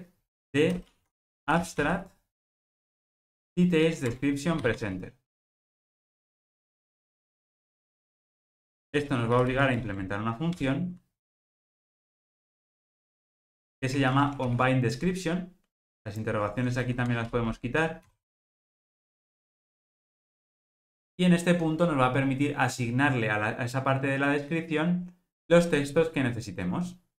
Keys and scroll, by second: 4.1 Return, 9.8 alt+Return, 14.0 alt+super+l.